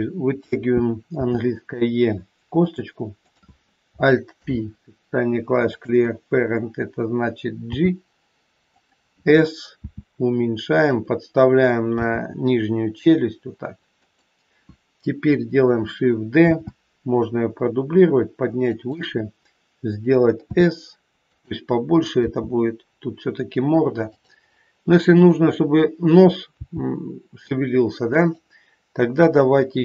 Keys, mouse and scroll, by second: 1.1 e, 3.2 click, 4.3 alt+p, 7.6 g, 9.8 s, 11.9 g, 16.4 shift+d, 20.5 s, 22.2 g, 25.2 click, 26.6 g.